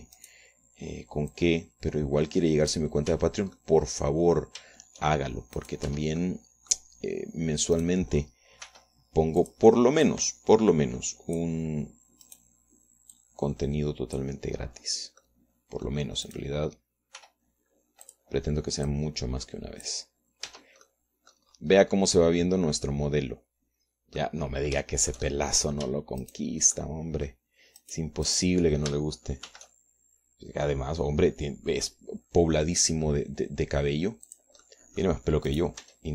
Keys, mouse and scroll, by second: 0.0 Tab, 0.1 click, 0.6 click, 1.1 Tab, 1.8 right click, 2.9-4.5 drag, 4.7 Tab, 5.2 right click, 6.1 shift+middle click, 7.2 right click, 7.4 Tab, 7.8-9.4 drag, 9.4 right click, 10.2 r, 11.0 click, 11.3 middle click, 11.6-13.2 drag, 13.8 click, 14.8-16.0 drag, 16.8 click, 17.6 middle click, 17.9 click, 18.2-19.4 middle drag, 18.8 r, 19.6 click, 20.5-21.6 drag, 22.0 Tab, 22.5 click, 23.1-23.6 scroll down 1, 23.6-26.0 drag, 26.0-27.3 middle drag, 27.3 right click, 27.4 shift+click, 27.8 shift+click, 28.4 shift+click, 29.4 shift+click, 29.9 shift+click, 31.1 shift+d, 35.9 click.